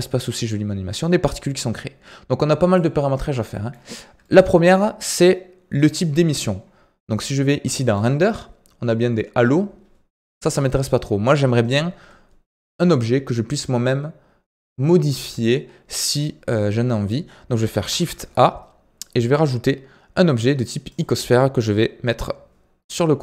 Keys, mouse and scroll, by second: 3.4-3.8 middle drag, 3.8-4.2 scroll down 1, 4.2-7.2 shift+middle drag, 7.9-17.8 drag, 17.8 shift+a.